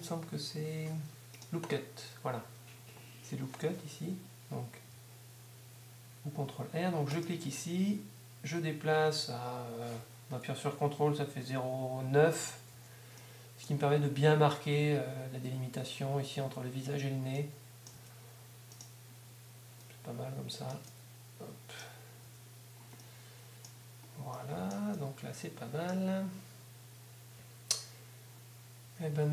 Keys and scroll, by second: 12.7 Tab, 17.9 Tab, 22.2 Tab, 28.8 Tab.